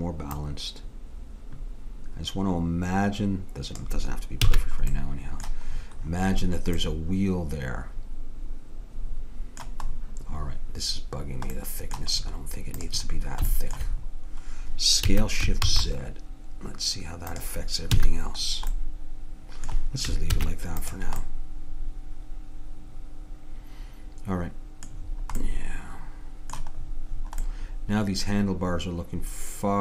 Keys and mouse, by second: 0.4-2.1 drag, 4.5 a, 4.6-8.0 middle drag, 12.8-14.6 drag, 15.1 s, 17.9 a, 20.4 ctrl+s, 25.5-27.5 middle drag.